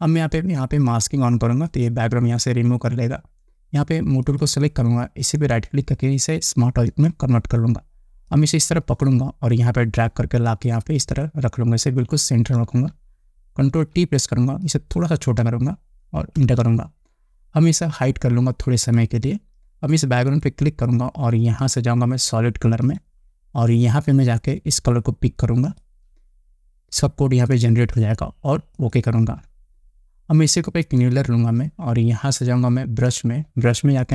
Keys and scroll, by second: 14.2 ctrl+t, 16.9 Return, 26.2 Return.